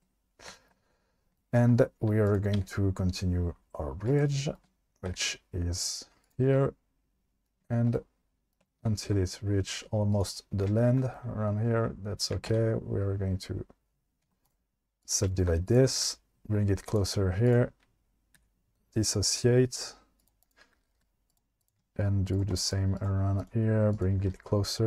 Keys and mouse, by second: 2.3 click, 2.6 e, 4.1 click, 5.1 e, 6.2 click, 6.9 middle click, 8.0 middle click, 8.7 shift+middle click, 9.1 e, 10.1 click, 10.9 shift+middle click, 12.5 e, 14.2 ctrl+z, 14.5 right click, 15.7 click, 15.9 g, 16.0 g, 16.9 click, 18.4 v, 20.2 click, 20.8 g, 21.0 g, 21.3 click, 22.7 click, 24.2 g, 24.3 g.